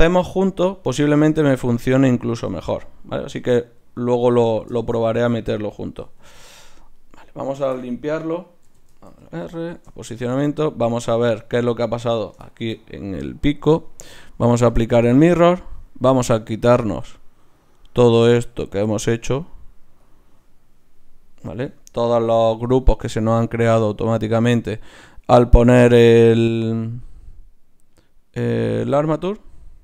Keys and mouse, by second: 1.1-3.9 middle drag, 3.9 ctrl+z, 4.4 middle click, 6.0 Tab, 7.0-9.1 drag, 7.6 a, 8.5 a, 8.7 alt+g, 9.1 alt+r, 12.1-14.7 right drag, 14.7-20.1 drag, 22.2-24.0 right drag, 23.5-25.3 drag, 27.0-29.0 drag, 29.3-29.8 drag.